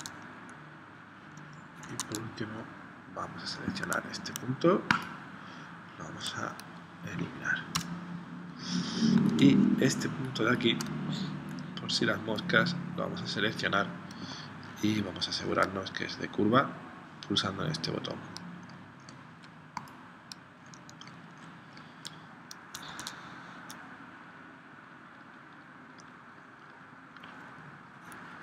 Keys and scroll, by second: 1.8 super+Tab, 3.8 a, 7.8 BackSpace, 9.7 space, 22.9 super+Tab.